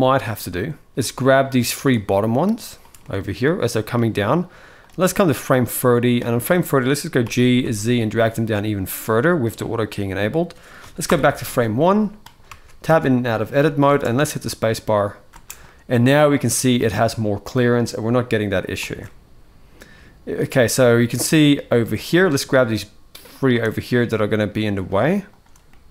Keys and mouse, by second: 0.2 space, 0.6 space, 0.9 space, 1.0 middle click, 1.6 shift+click, 2.7-3.6 middle drag, 4.5-5.9 drag, 6.5 middle click, 6.9 g, 10.8 shift+Left, 11.5 middle click, 12.2 Tab, 12.6 Tab, 13.3 middle click, 13.6 space, 15.1 space, 15.4-16.5 middle drag, 17.3 middle click, 17.3 space, 18.6 space, 18.7-20.0 middle drag, 20.4-21.2 middle drag, 21.6 click, 22.0-22.3 middle drag, 23.1 shift+click, 23.4-24.6 middle drag, 25.4-25.9 middle drag.